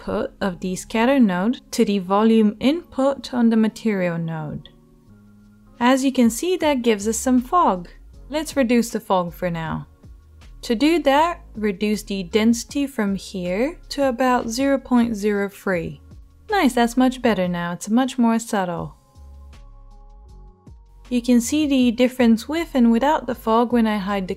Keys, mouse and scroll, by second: 1.6-3.6 drag, 23.1 h.